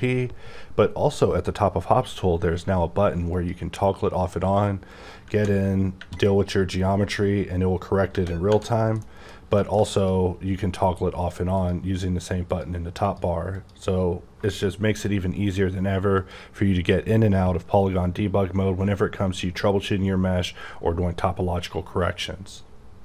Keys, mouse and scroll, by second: 3.3 click, 4.9 scroll up 4, 5.3 Tab, 5.5 scroll down 2, 7.0-8.1 scroll down 1, 8.4 Tab, 9.0 middle click, 9.3 scroll down 2, 9.6 shift+middle click, 10.0 click, 11.5 click, 12.4 click, 13.0 click, 13.5 click, 16.2 click.